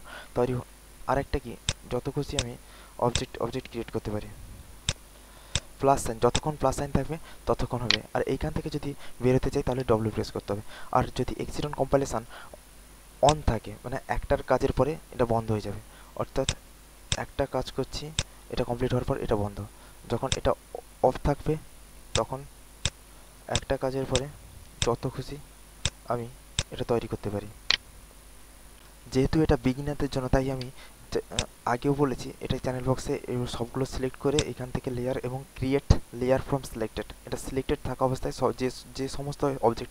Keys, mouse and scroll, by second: 0.9 alt+middle click, 1.6-6.3 drag, 7.5 alt+middle click, 9.9 w, 10.6 alt+click, 11.1 alt+middle click, 13.2 click, 14.4 alt+middle click, 14.9 alt+right click, 15.3 alt+middle click, 16.4 click, 20.8 alt+middle click, 22.1 click, 22.9-26.5 drag, 27.2 alt+middle click, 27.6 alt+right click, 30.6 w, 31.2-39.9 drag.